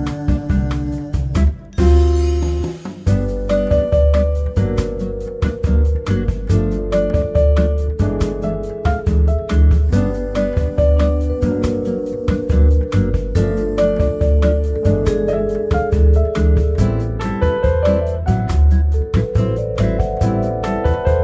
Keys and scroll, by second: 0.1 ctrl+d, 4.5 ctrl+x, 5.1 Delete, 5.4 ctrl+v, 8.0 Tab, 10.6 ctrl+z, 17.3 typing.